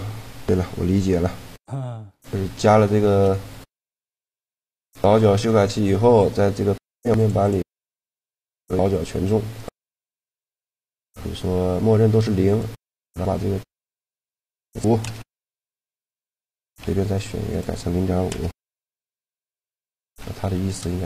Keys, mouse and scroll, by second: 0.8 t, 4.3-6.8 middle drag, 6.8-9.0 drag, 9.3-14.1 right drag, 11.4 click, 13.8-15.6 drag, 16.5-18.1 right drag, 17.3-19.0 drag, 19.5 middle click, 20.2 shift+g.